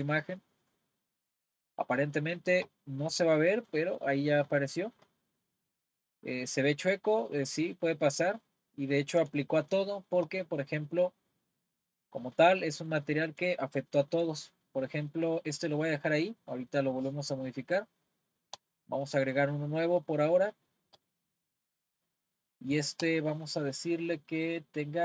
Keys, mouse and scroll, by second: 3.7-6.4 middle drag, 6.4-7.9 drag, 7.9-10.4 middle drag, 10.4-11.5 scroll up 5, 11.5-12.1 scroll up 4, 12.1-12.6 scroll up 3, 12.6-15.6 middle drag, 18.6-25.0 drag.